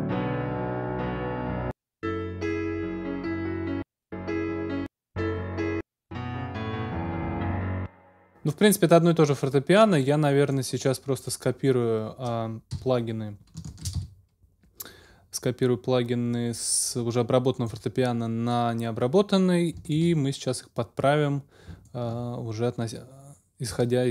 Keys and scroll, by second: 7.6 space, 12.7 x, 13.6 super+x, 13.6 super+space, 13.9 super+x.